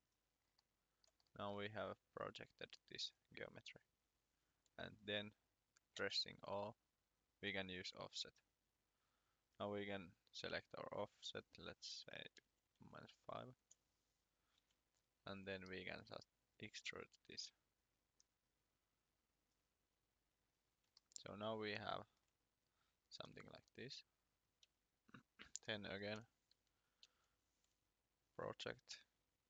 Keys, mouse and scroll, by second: 2.1-2.7 scroll down 1, 2.9-3.3 scroll up 1, 4.9-5.4 scroll down 1, 5.9 o, 7.4 click, 12.7 5, 13.6 Return, 14.6 e, 15.2 click, 20.9 shift+middle click, 23.5 scroll down 2, 24.3 click, 24.6 r, 25.7 middle click, 27.0 p, 28.3 click.